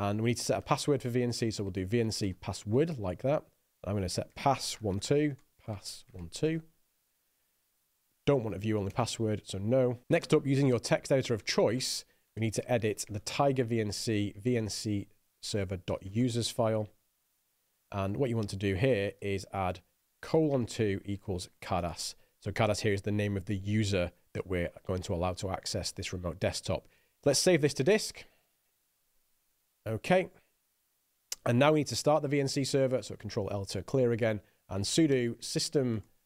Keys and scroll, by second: 0.0-6.1 typing, 8.4 n, 8.9 Return, 10.0 Return, 10.0-16.4 typing, 16.6 Tab, 17.3 Return, 18.4-23.4 typing, 28.3 Escape, 28.7-29.9 typing, 33.6 ctrl+l, 35.0-36.2 typing.